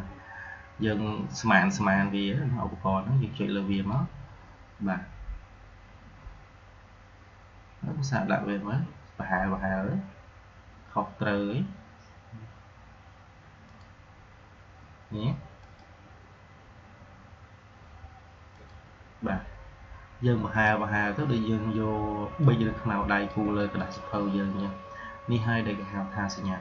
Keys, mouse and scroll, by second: 3.6 click, 13.6 click, 18.5 click, 21.7-23.7 drag.